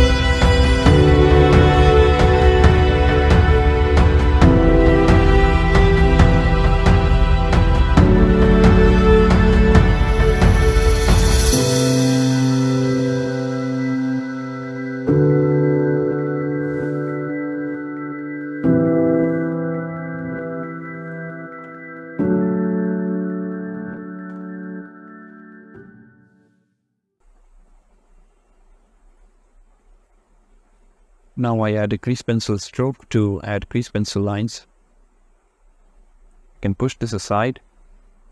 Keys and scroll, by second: 31.4 shift+a, 37.1 g, 37.6 x.